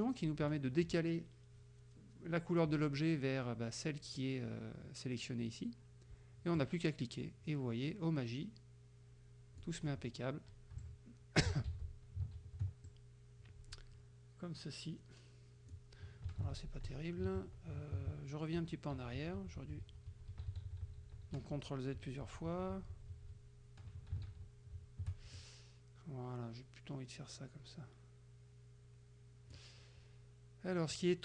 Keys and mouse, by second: 6.6-9.9 drag, 10.9 shift+click, 11.7 ctrl+shift+z, 12.9 ctrl+z, 12.9-16.0 ctrl+drag, 16.5 ctrl+z, 17.4 ctrl+z, 18.2 ctrl+z, 24.3 ctrl+shift+z, 25.4-29.8 ctrl+shift+drag.